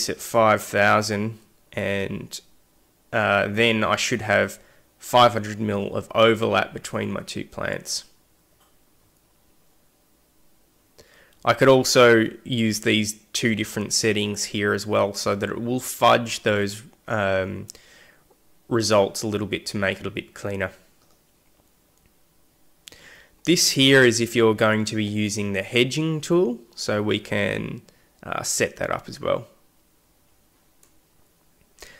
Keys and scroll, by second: 0.0-0.4 typing.